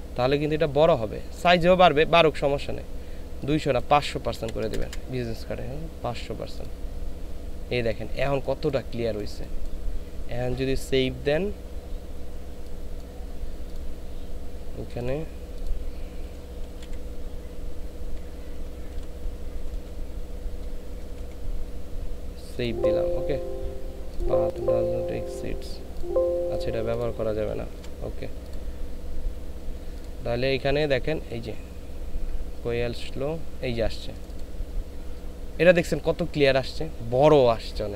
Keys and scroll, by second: 4.4 KP_5, 4.7 KP_0, 4.8 KP_0, 16.3 b, 16.7 u, 16.8 s, 18.9-21.1 typing, 27.8 BackSpace.